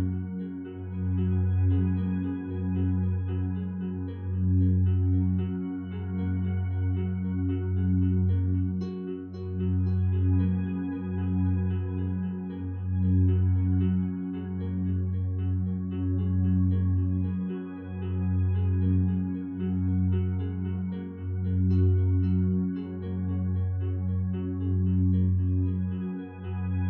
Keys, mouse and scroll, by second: 3.3 F9.